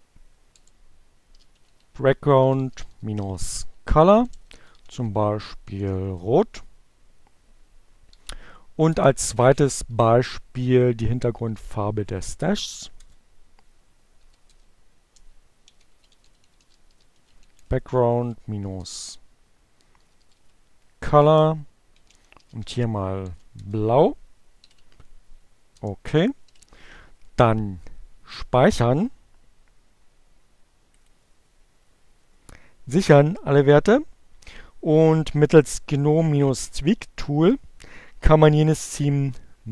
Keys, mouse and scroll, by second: 0.0-4.5 typing, 6.4 alt+0, 10.1-11.4 typing, 13.0 alt+7, 13.3 space, 13.4 a, 15.1-18.2 typing, 19.3-22.3 typing, 22.6 shift+Return, 23.4 BackSpace, 25.6 alt+0, 28.7-30.4 drag.